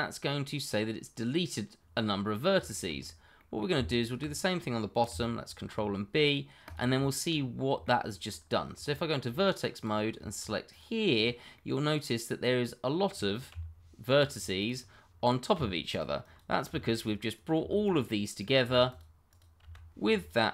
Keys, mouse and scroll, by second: 1.7-2.2 scroll down 1, 2.2 middle click, 2.8 shift+middle click, 2.9-3.3 scroll up 1, 3.3 middle click, 4.0 alt+click, 4.0 click, 5.5 ctrl+b, 6.6 click, 7.1 shift+middle click, 7.3-7.8 scroll up 1, 7.8 shift+middle click, 8.2-8.7 scroll up 1, 8.7 Tab, 9.7 click, 11.2 double click, 11.5 middle click, 13.5 g, 14.2 click, 14.6 double click, 15.5 g, 15.9 click, 16.3 double click, 16.6 g, 16.9 click, 17.4 double click, 17.5 g, 17.8 click, 18.6 g, 19.0 double click, 19.6 g, 20.2 click.